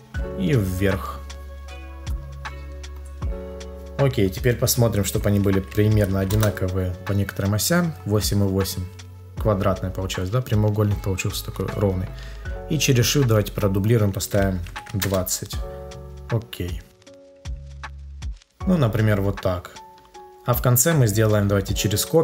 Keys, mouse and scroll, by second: 6.3 Return, 11.7 shift+click, 15.0 Return, 21.5 shift+click.